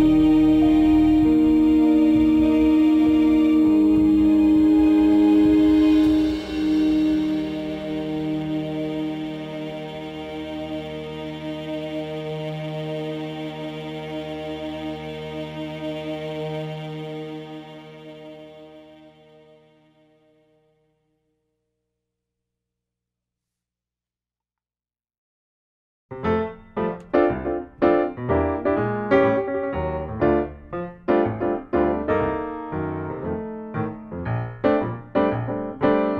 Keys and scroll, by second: 13.8 5, 15.1 BackSpace, 16.4-17.3 typing, 17.6 Return, 30.6 ctrl+shift+s, 34.2 d, 35.4-36.1 typing.